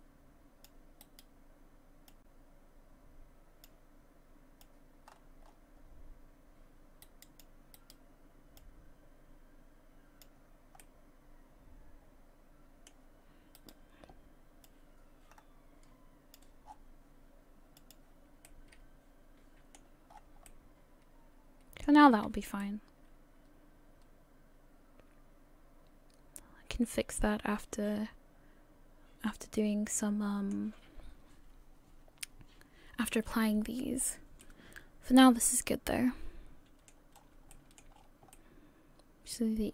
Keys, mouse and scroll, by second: 17.8 click, 17.8-18.5 scroll down 6, 18.5 middle click, 20.2 scroll down 3, 20.5 middle click, 22.1 a, 22.3 a, 22.6 middle click, 33.8-34.4 scroll down 1, 34.4 middle click, 37.2 scroll up 4, 37.6 shift+middle click, 37.9 scroll up 2, 38.3 middle click.